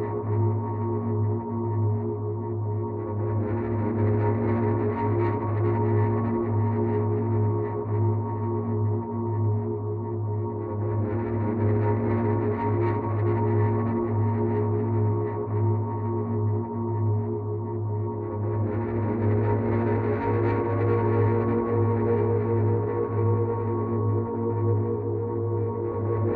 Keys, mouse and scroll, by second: 0.3 click, 1.8 click, 5.2 click, 7.1 right click, 12.3 click, 15.4 click, 17.5 click, 19.9 ctrl+z, 21.4 click, 23.2 ctrl+z, 25.8 right click.